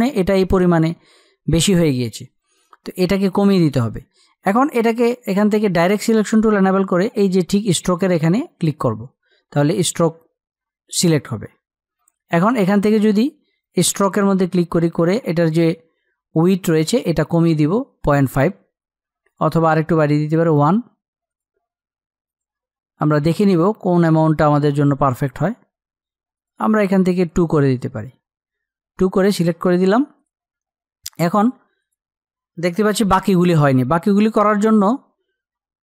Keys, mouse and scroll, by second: 34.9-35.8 drag.